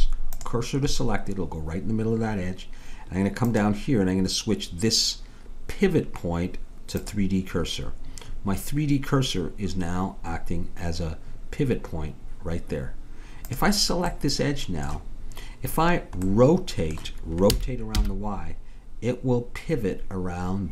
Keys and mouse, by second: 3.5-5.2 drag, 13.5-15.4 drag, 15.4 middle click, 17.5 r.